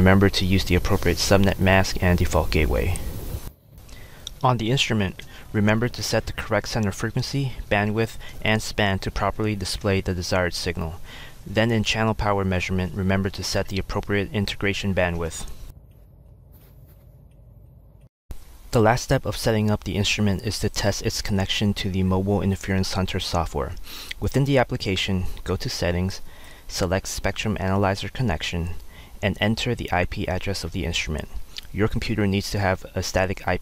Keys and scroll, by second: 29.0-31.6 typing.